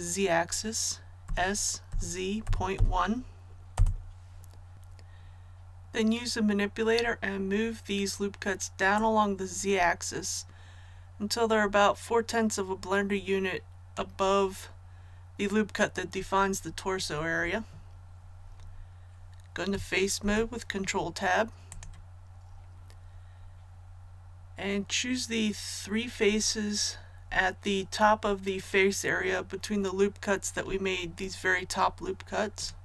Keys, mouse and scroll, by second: 1.2 s, 1.9 z, 2.4 KP_Decimal, 2.7 KP_1, 3.7 Return, 4.7-14.5 drag, 20.1 Tab, 21.6 click, 32.5 right click.